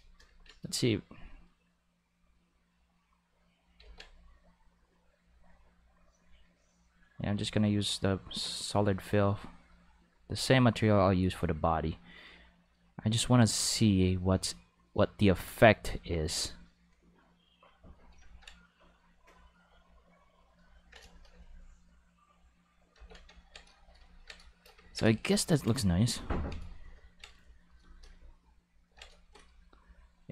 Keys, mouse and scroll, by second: 2.0-3.0 drag, 3.8 ctrl+z, 4.4-17.5 drag, 19.1 click, 21.5 ctrl+middle click, 22.9 ctrl+z, 24.8 ctrl+middle click, 25.1 shift+middle click, 25.5 ctrl+middle click, 25.8 shift+middle click, 26.3 ctrl+middle click, 27.0 ctrl+middle click.